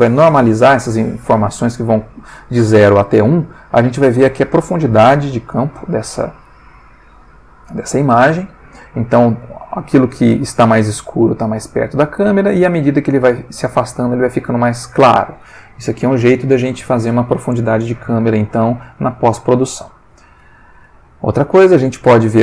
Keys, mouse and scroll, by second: 3.6 click, 20.1 click, 21.3-22.4 drag.